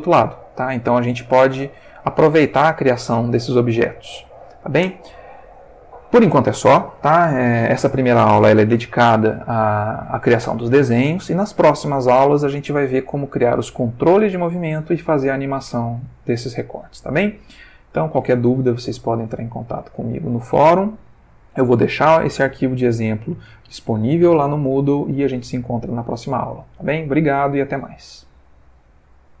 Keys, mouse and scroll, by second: 0.5 shift+middle click, 1.4 ctrl+shift+middle click.